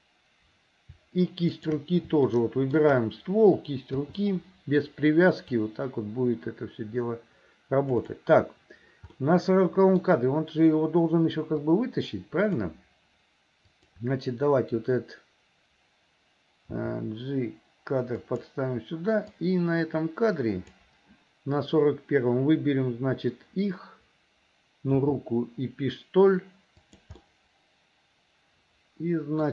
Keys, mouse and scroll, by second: 1.5 shift+click, 2.3 shift+middle click, 4.1 i, 5.6-8.2 drag, 9.2 middle click, 11.7-12.7 drag, 13.7 click, 16.8 g, 19.4-20.9 drag, 24.9 g, 27.2-29.5 middle drag.